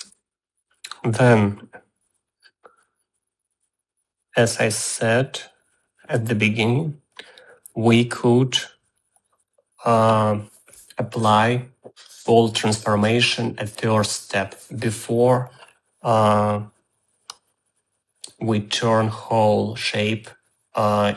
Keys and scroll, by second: 0.5 space.